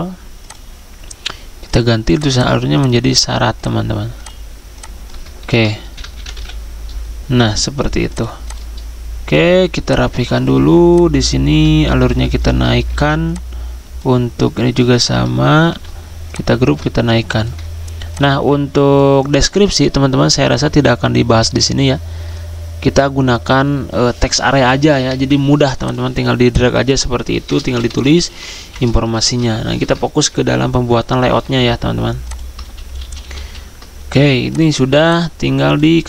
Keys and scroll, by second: 5.5-6.3 typing, 12.9 ctrl+g, 14.7 ctrl+g, 15.5 ctrl+g, 27.6-28.5 typing, 29.2 ctrl+a, 29.8 BackSpace, 30.3 Escape, 32.6 ctrl+z, 32.8-33.6 typing.